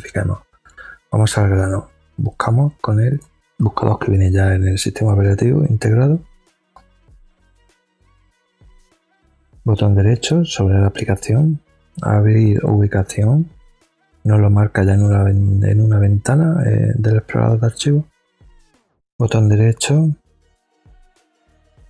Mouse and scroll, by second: 2.3 click, 10.1 right click, 12.5 click, 18.9 right click.